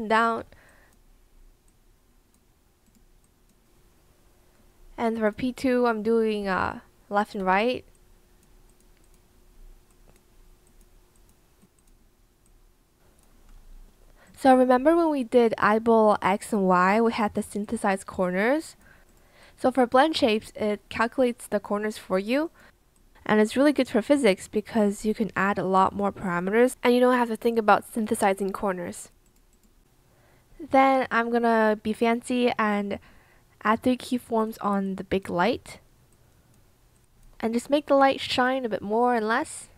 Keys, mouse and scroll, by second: 6.4 b.